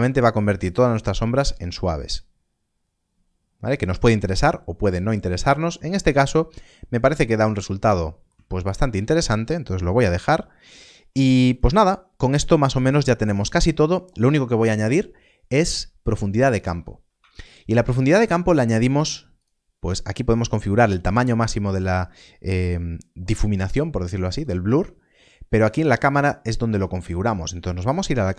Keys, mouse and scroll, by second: 7.3 shift+middle click, 11.4 click, 17.1 click, 17.7 shift+middle click, 19.3 click, 24.2 click.